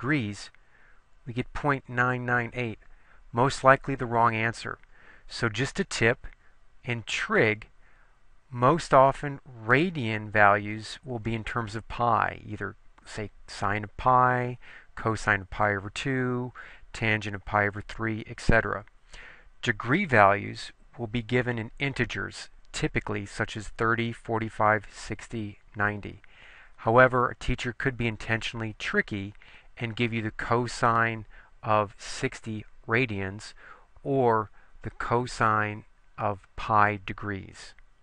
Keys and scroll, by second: 0.2 Return.